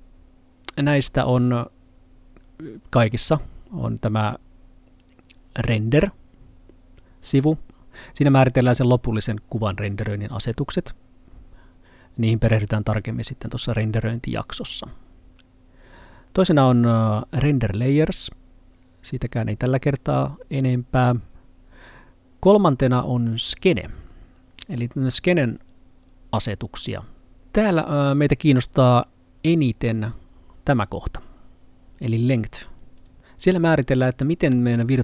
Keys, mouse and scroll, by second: 17.1 click, 23.5 click, 33.0 click.